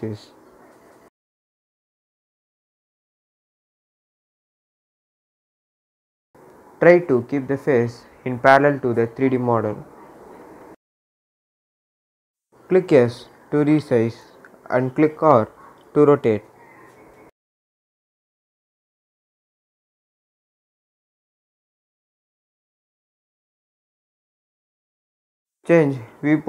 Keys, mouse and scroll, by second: 0.7-8.4 drag, 8.4-9.8 scroll up 1, 9.8-12.5 drag, 12.5 s, 13.3-16.3 drag, 16.3 r, 18.2-21.8 drag, 21.8-22.8 scroll up 1, 22.8 s, 24.1 click.